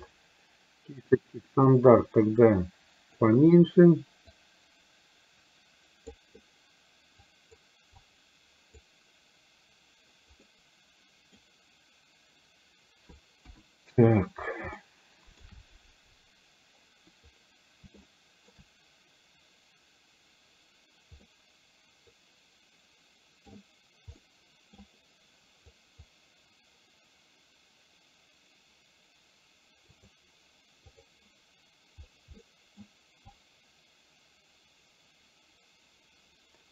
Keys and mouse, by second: 1.8-3.4 drag, 4.4-6.1 drag, 7.4 click, 8.0 click, 10.4-11.4 middle drag, 13.5 KP_1, 14.8 shift+middle click, 18.1 shift+middle click, 21.4-23.5 middle drag, 24.3 middle click, 25.8 click, 30.1 click, 32.5 middle click, 33.3-36.7 drag.